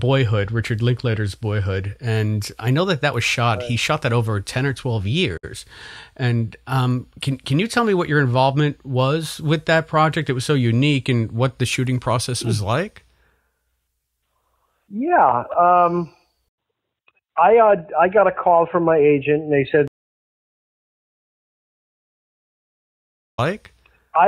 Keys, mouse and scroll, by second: 0.0 click, 1.0 click, 1.5 click, 2.6-5.1 drag, 5.3 Delete, 6.9 click, 7.5 click, 8.2-10.1 drag, 10.3 click, 11.0 click, 12.7 click, 14.2 click, 15.3 click, 16.4 Delete, 17.0 click, 18.6-19.7 drag, 20.4 click, 21.4-22.7 drag, 23.2 click, 23.3 space.